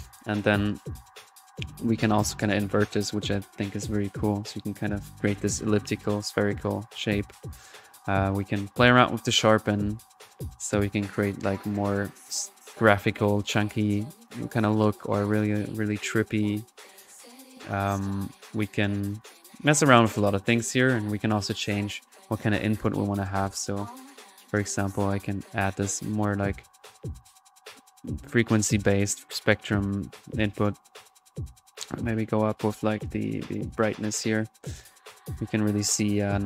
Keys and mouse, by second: 0.0 ctrl+p, 0.9-19.4 drag, 19.7 middle click, 20.6-21.0 drag, 21.5 middle click, 21.8 drag, 22.6-26.5 drag, 26.1 1, 27.8 click, 28.9 click, 29.6-30.8 middle drag, 31.0 click, 32.0 click, 34.3 middle click, 34.7-35.3 drag.